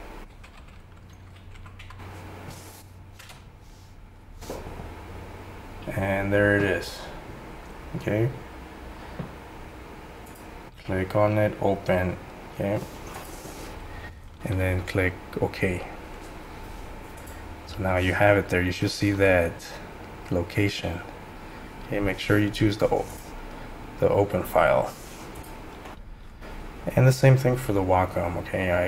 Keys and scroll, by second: 0.2-2.3 typing, 3.2 Return.